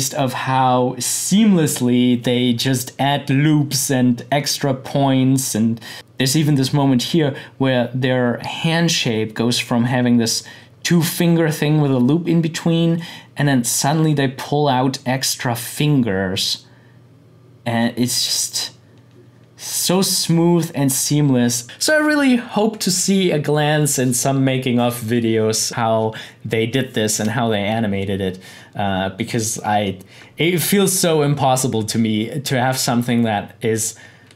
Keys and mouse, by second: 5.9-7.8 drag, 12.9-20.6 drag.